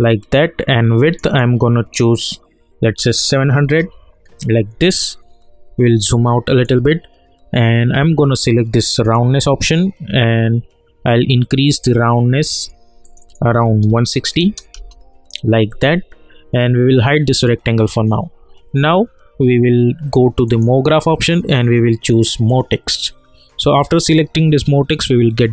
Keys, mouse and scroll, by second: 3.6 Return, 4.2 scroll down 1, 4.3 scroll up 1, 4.7 scroll down 1, 5.3-5.7 scroll down 1, 5.9-9.0 alt+middle drag, 9.0-13.0 drag, 14.7 Return, 17.3 click, 20.4 click, 23.6-25.5 scroll up 1.